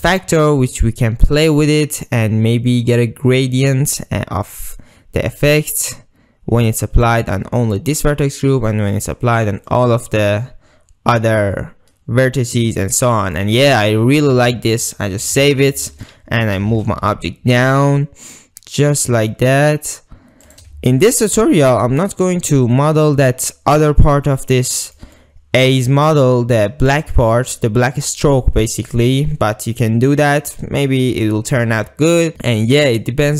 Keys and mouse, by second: 0.2-7.1 drag, 9.7-13.4 middle drag, 13.6-14.2 middle drag, 14.5 middle click, 15.5 ctrl+s, 15.8-16.1 middle drag, 16.6 g, 16.7 z, 20.5 shift+click, 21.0 ctrl+middle drag, 21.4 middle click, 22.2 middle click, 22.8 middle click, 24.4-25.0 middle drag, 25.2-26.2 middle drag, 28.9-31.3 middle drag, 31.6-33.3 middle drag.